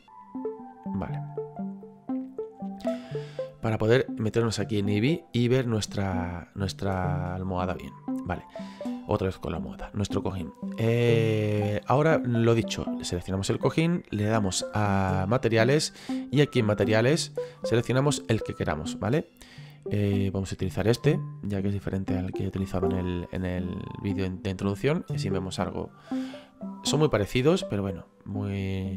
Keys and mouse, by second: 1.8 click, 4.6 click, 6.3 middle click, 13.1 right click, 16.7 click, 20.2 click, 28.4 middle click.